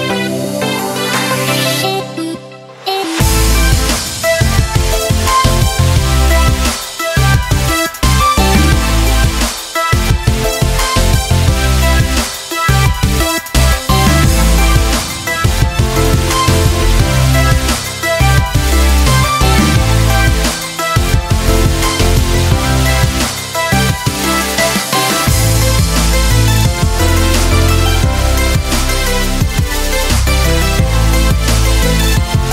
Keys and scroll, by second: 13.6 [.